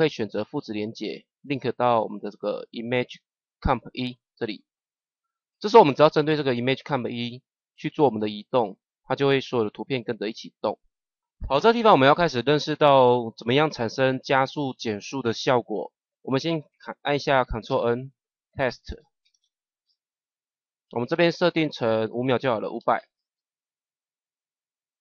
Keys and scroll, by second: 17.6 ctrl+n, 18.9 t, 22.7 KP_5.